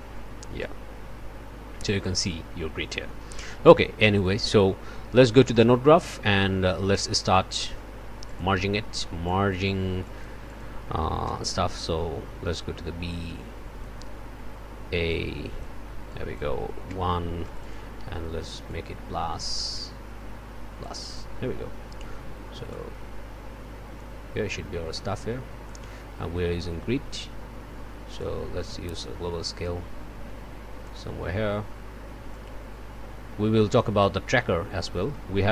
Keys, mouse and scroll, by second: 0.6-3.6 drag, 4.2 click, 5.5 click, 6.4 click, 7.0 click, 7.5 middle click, 7.5-8.3 scroll down 2, 7.6 click, 7.9 middle click, 8.3 click, 9.2 click, 10.0 click, 10.4-10.8 scroll up 1, 11.2 m, 13.1 click, 15.1 click, 16.1 click, 16.9 1, 17.4 click, 18.7-21.0 drag, 22.7-25.9 drag, 28.2-31.1 drag, 32.3-35.5 drag.